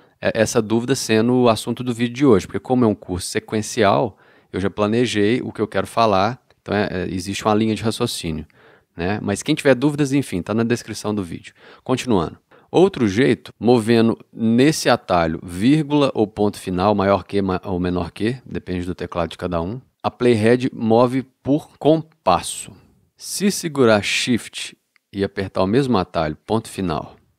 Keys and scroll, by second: 13.4 ,, 14.6 ., 18.8 ,, 20.4 ., 26.8 shift+..